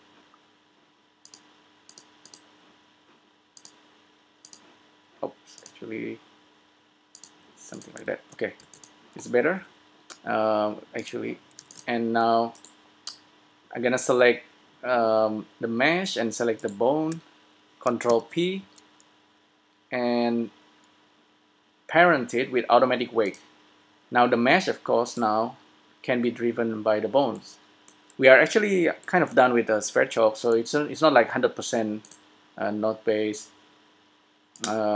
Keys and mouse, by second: 5.9-7.5 drag, 8.0-9.6 drag, 8.2 a, 9.1 s, 11.1-12.8 drag, 11.8 s, 12.8-14.6 right drag, 17.0-18.7 right drag, 18.5 ctrl+p, 32.2-34.0 drag.